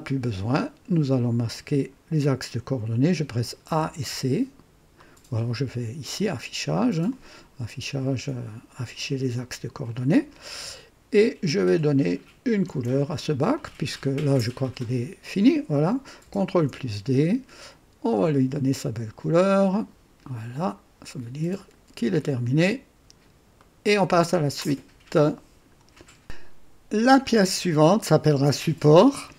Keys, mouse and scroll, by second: 3.6-3.9 typing, 4.9 right click, 7.0 click, 9.8 click, 11.6 click, 13.5-16.0 drag, 16.4 ctrl+d, 16.5 typing, 18.0 click, 19.6 click, 20.6 click, 21.5 click, 22.1-23.4 drag, 23.5 right click, 24.6-25.8 right drag, 25.2 click.